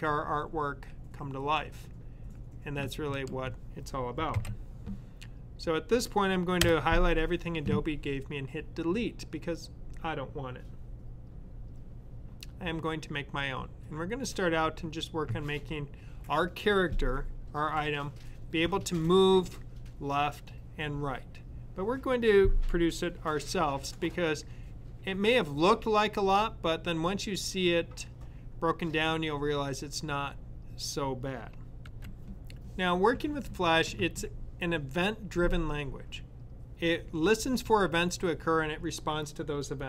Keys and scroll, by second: 4.1 super+a.